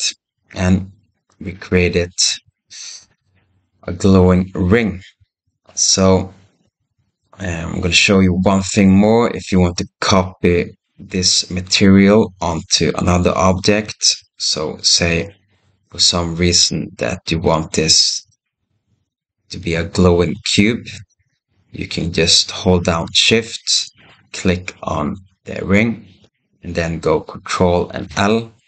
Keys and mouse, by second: 1.4-2.3 middle drag, 3.0 KP_0, 14.1 shift+a, 18.1 g, 19.4 s, 27.9 ctrl+l.